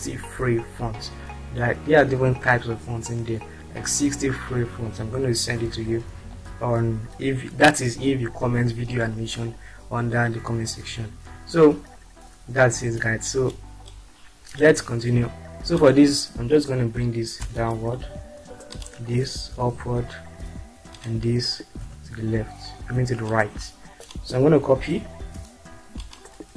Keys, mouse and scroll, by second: 14.5 click, 17.4 Down, 19.5 Up, 20.9 click, 21.9 Right, 23.5 click, 25.3 ctrl+c.